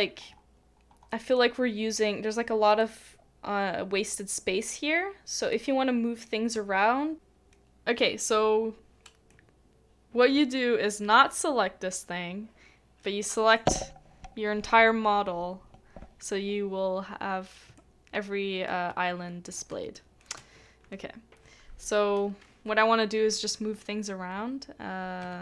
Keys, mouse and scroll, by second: 1.1 middle click, 5.4 middle click, 5.5 shift+middle click, 9.3 middle click, 17.8 shift+middle click, 19.9 shift+middle click.